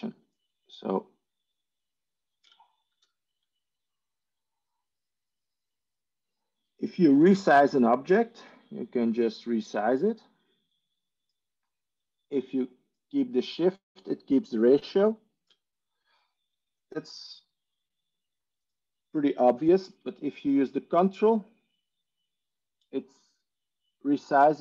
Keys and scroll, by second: 2.8 ctrl+z.